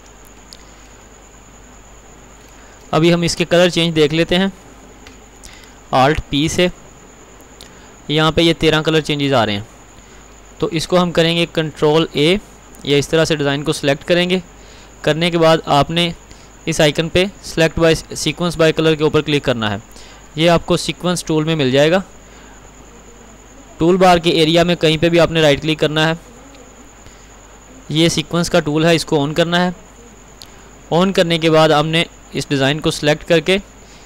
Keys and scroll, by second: 5.7 alt+p.